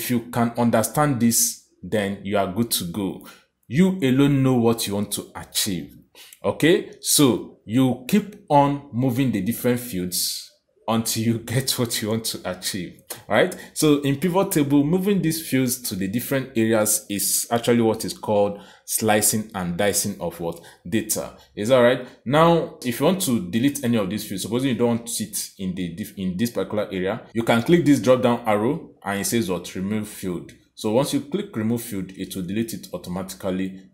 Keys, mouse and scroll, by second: 0.5 click, 22.4 click, 26.8 right click, 27.7 click, 31.7 click.